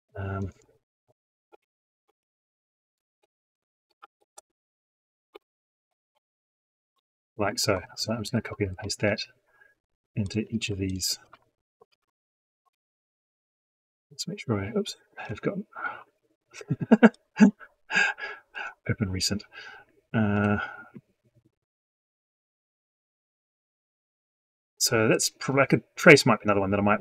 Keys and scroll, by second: 7.7 ctrl+shift+Left, 8.8 ctrl+c, 10.4 ctrl+v.